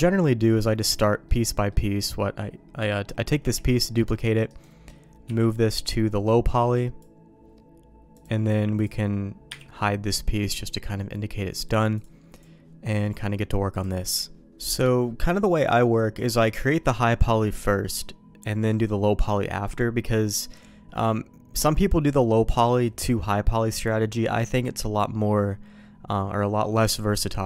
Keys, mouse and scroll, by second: 0.8 middle click, 1.2 middle click, 3.8 shift+d, 5.2 m, 8.1 click, 8.8 click, 9.5 h, 10.5 middle click, 11.9 click, 12.9 middle click, 15.0 middle click, 16.1 middle click.